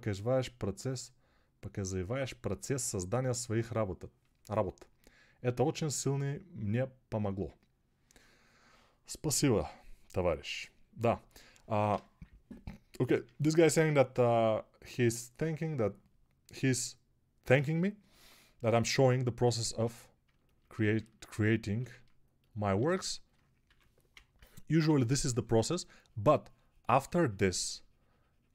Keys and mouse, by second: 19.5 ctrl+Tab, 22.6 alt+q, 23.5 3, 24.0-24.7 ], 27.7-28.5 drag.